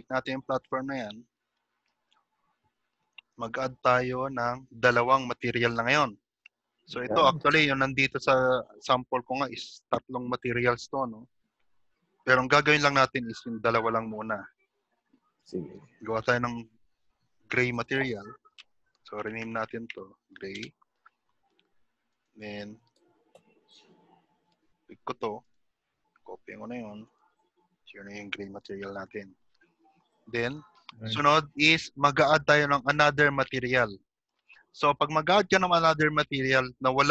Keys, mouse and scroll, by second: 1.5 click, 1.5 middle click, 1.5-1.9 scroll down 6, 2.6-3.0 scroll down 2, 4.0 click, 6.7-7.3 scroll up 2, 7.5-10.6 scroll up 5, 16.6 click, 22.1 click, 28.6 middle click, 30.5 click, 34.5 click.